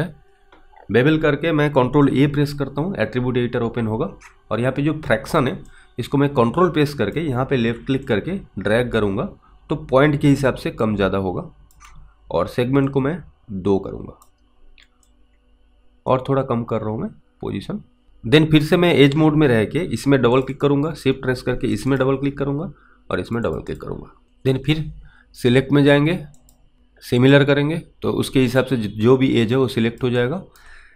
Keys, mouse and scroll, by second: 2.2 ctrl+a, 6.0 ctrl+click, 8.3 ctrl+click, 13.1 click, 15.3 ctrl+click, 20.4 click, 20.6 double click, 21.8 shift+click, 21.9 shift+double click, 23.3 shift+click, 23.5 shift+double click, 23.7 shift+click, 24.3 alt+right click, 26.5 click, 28.8 alt+click, 30.5 alt+right click.